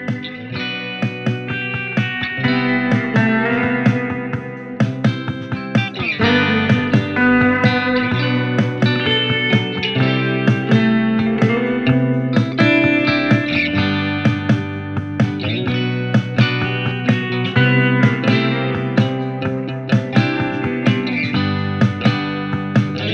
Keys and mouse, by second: 12.3 f, 12.9 middle click, 13.4-21.5 drag, 21.5 f, 22.1 shift+middle click.